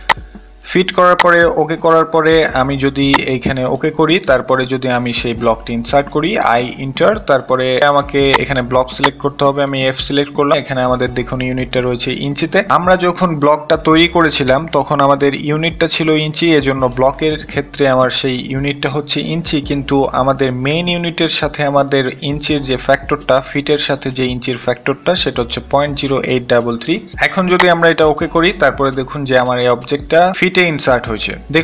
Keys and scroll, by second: 6.3 i, 6.5 Return.